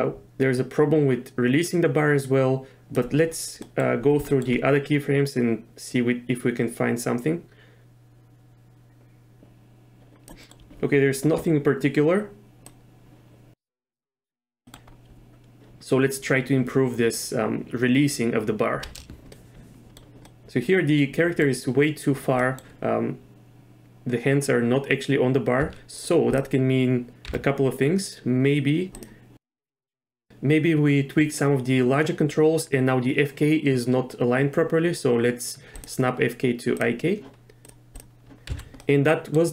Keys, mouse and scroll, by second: 3.6 middle click, 4.3 shift+middle click, 5.9-10.3 drag, 10.4 middle click, 12.7-14.0 drag, 14.6 middle click, 18.8 n, 19.3-20.0 middle drag, 20.2-21.4 middle drag, 22.4 middle click, 25.6 z, 25.9 click, 27.3 n, 28.9 click, 29.7 click, 35.7 click, 36.8 click, 38.5 z, 38.8 middle click.